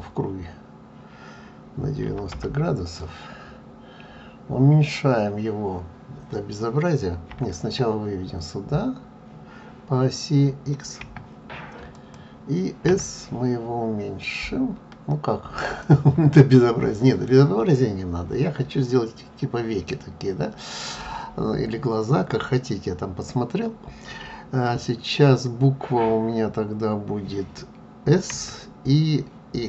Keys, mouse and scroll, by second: 0.0 click, 16.3 middle click.